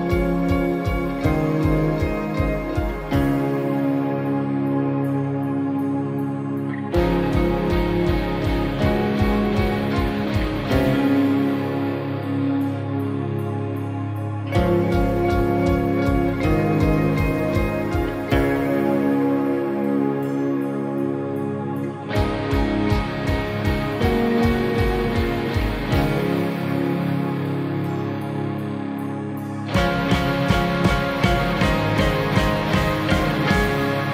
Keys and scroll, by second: 2.0 ctrl+0, 12.2 ctrl+j.